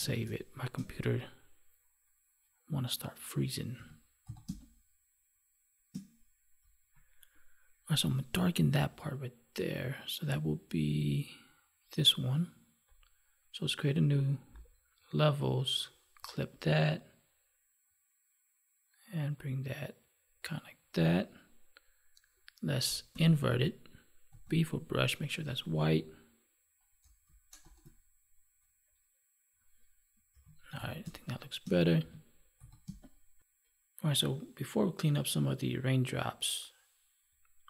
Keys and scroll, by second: 0.2 space, 3.7 ctrl+s, 4.4 space, 23.1 ctrl+i, 30.3 ctrl+s, 31.0 space, 32.8 space.